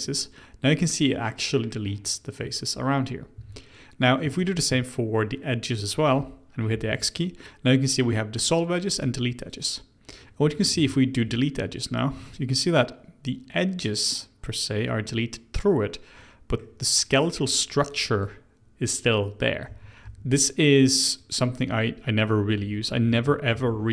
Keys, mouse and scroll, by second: 0.0-3.3 middle drag, 3.3 2, 4.3 alt+click, 6.7 x, 10.1 middle click, 10.7 ctrl+z, 11.2 x, 12.1-15.1 middle drag, 16.1-17.8 middle drag, 17.8 click, 19.6 w, 20.0 w, 20.7 click, 21.5-22.6 middle drag, 22.6 ctrl+z, 23.0 ctrl+z, 23.5 ctrl+z.